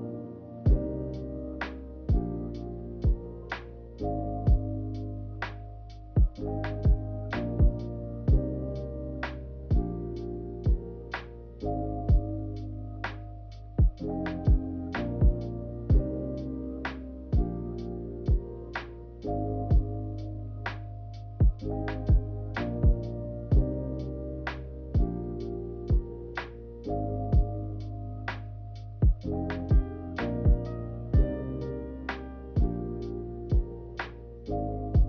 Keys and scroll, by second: 12.7 g, 14.6 z.